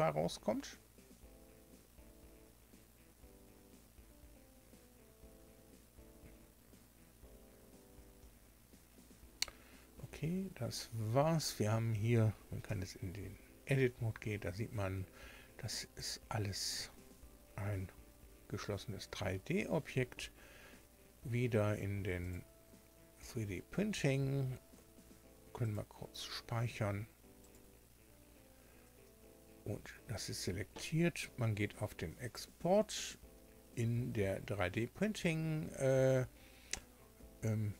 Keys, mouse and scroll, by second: 12.6 Tab, 13.8-14.2 scroll up 2, 15.1-15.6 scroll down 2, 16.3 scroll up 2, 16.7 Tab, 22.1 click, 25.5 click, 27.3 click, 32.3 click.